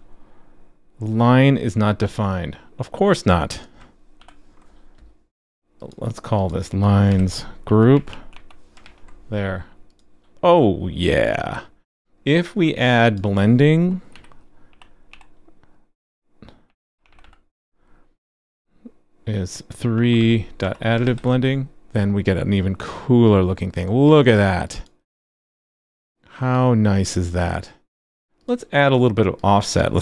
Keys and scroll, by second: 4.2 alt+super+j, 5.6 alt+super+j, 8.8 super+s, 21.0 super+s.